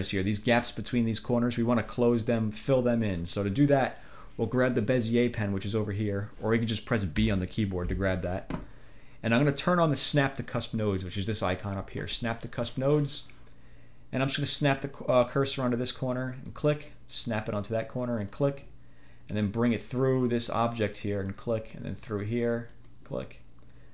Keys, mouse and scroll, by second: 7.3 b, 12.4 click, 16.4 click, 18.4 click, 21.4 click, 22.8 click.